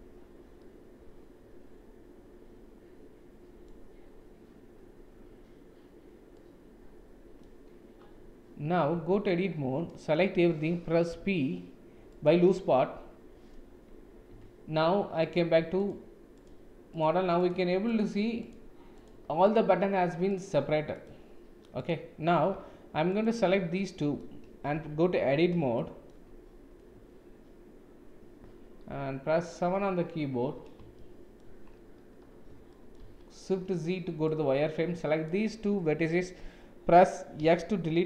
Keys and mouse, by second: 0.5-3.5 middle drag, 6.4-7.4 middle drag, 8.9 Tab, 11.1 p, 14.3 Tab, 15.3 click, 15.7 click, 16.3 click, 16.9 click, 17.3 click, 17.9 click, 19.5 click, 20.2 click, 21.0 click, 21.7 click, 23.0 shift+click, 23.7-24.1 middle drag, 24.7 Tab, 25.8 shift+middle click, 28.9 KP_7, 31.0 shift+middle click, 32.7 shift+middle click, 33.0 shift+z, 34.2-35.4 drag, 37.3 x.